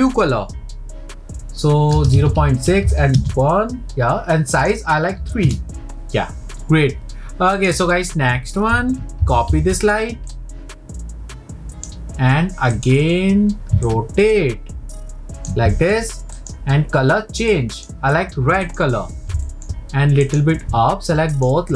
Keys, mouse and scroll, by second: 4.5-9.2 drag, 9.2 ctrl+c, 10.3 click, 12.8-13.9 drag, 15.5 ctrl+click, 16.4 click, 18.6 click, 19.5-20.2 shift+middle drag, 20.2 click, 21.3 shift+click.